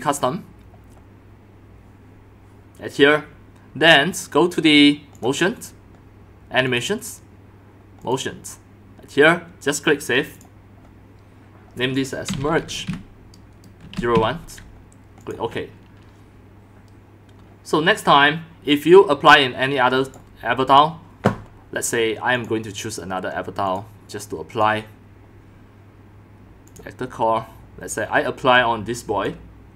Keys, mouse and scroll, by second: 2.6-4.9 drag, 5.1 click, 5.2 click, 6.7 click, 7.0-7.6 drag, 8.0 click, 10.3 click, 10.8 middle click, 12.0-14.1 typing, 15.2 click, 20.0 click, 20.1-21.7 drag, 22.3 click, 23.7 click, 24.5 click, 26.7 click, 28.5 click.